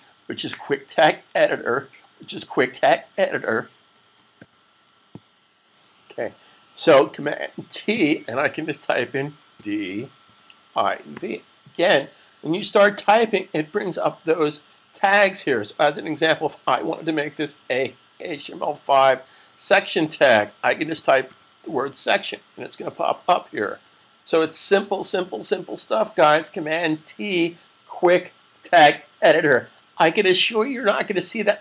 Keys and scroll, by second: 9.4-10.9 typing, 18.9 typing, 20.3-21.1 typing, 22.7-23.4 typing, 25.1 <.